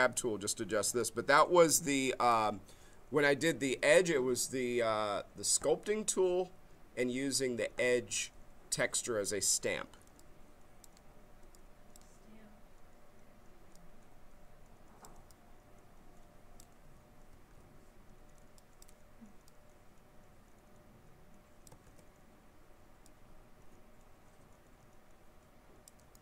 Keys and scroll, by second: 17.3 ctrl+z, 21.8 ctrl+z.